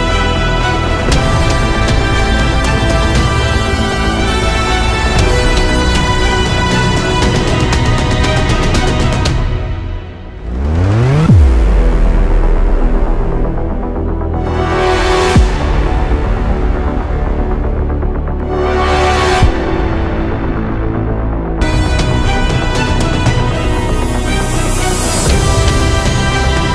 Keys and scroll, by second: 9.1 ctrl+e.